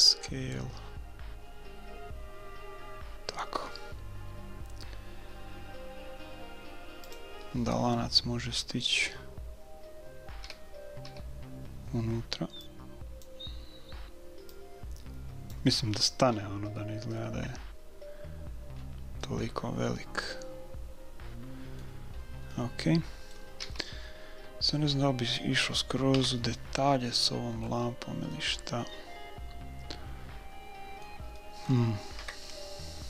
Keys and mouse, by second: 10.5 a, 11.0 a, 12.7-16.0 drag, 16.0-18.3 middle drag, 16.2 click, 18.4-21.2 middle drag, 21.8-26.0 middle drag, 23.6 a, 26.2 KP_1, 27.2-30.3 middle drag, 31.4-33.0 middle drag, 32.2 KP_1.